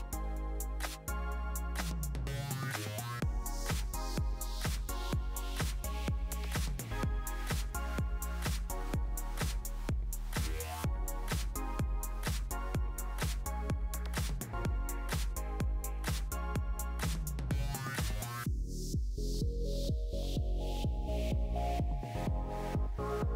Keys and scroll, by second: 10.9 1, 11.2 Return, 17.8 5, 17.9 5, 18.1 Return, 19.7 typing, 20.0 Return.